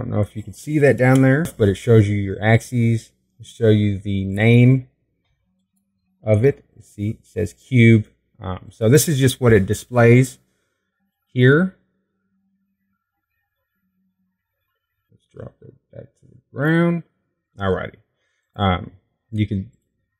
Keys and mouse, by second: 6.0-9.1 drag, 10.3-12.2 drag, 12.8-18.5 drag.